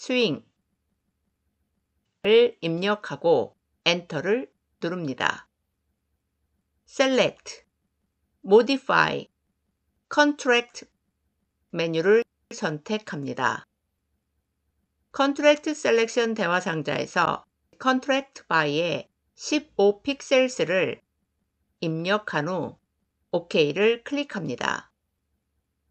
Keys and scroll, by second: 3.8 Return.